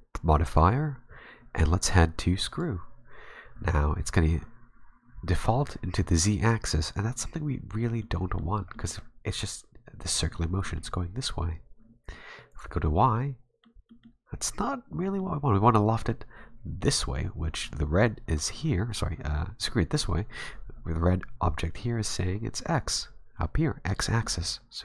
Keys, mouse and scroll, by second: 8.0 middle click, 8.5-9.0 scroll down 2, 8.7 middle click, 10.6 scroll up 1, 10.6 middle click, 12.5 click, 13.1 middle click, 13.9 middle click, 15.2 middle click.